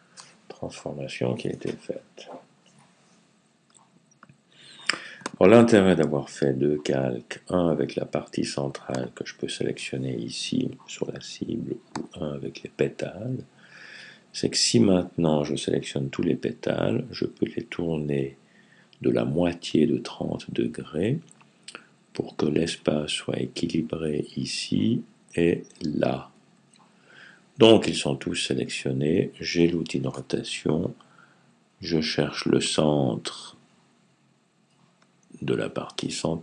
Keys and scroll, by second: 2.3 typing.